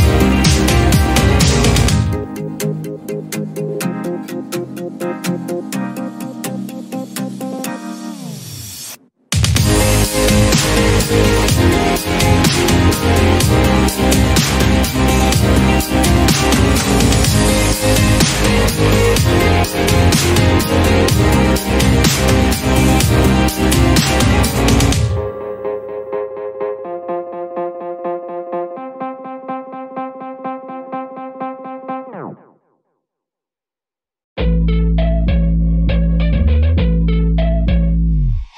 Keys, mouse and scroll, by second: 0.5 scroll down 1, 0.7 shift+middle click, 1.4 Tab, 1.5 click, 1.9 Tab, 2.4-4.0 shift+middle drag, 4.4 click, 5.8 x, 6.6 shift+middle click, 7.3 click, 9.0 x, 10.0-11.4 shift+middle drag, 11.4 scroll up 1, 11.8 shift+middle click, 12.3-12.9 scroll up 2, 13.7 click, 15.4 click, 17.2 x, 18.6-19.3 scroll down 1, 19.3 scroll down 1, 19.4 shift+middle click, 19.7 scroll up 1, 19.9 shift+middle click, 20.7 click, 21.7 x, 22.6 click, 23.4-23.8 scroll up 4, 23.8 shift+middle click, 24.0 scroll up 5, 24.3 shift+middle click, 25.3-26.2 drag, 26.2-27.5 scroll up 1, 27.5 e, 29.6 scroll down 1, 29.9 e, 31.9-32.6 scroll down 10, 32.6 Tab, 33.0 click, 33.2-33.7 scroll down 3, 33.7 alt+z, 33.9-34.3 scroll up 6, 34.3-36.1 middle drag, 36.1 KP_1, 36.5 scroll down 6, 36.7 shift+middle click, 37.2 scroll up 2, 37.5 click, 37.7 Tab, 37.9 scroll up 1, 38.2 shift+middle click.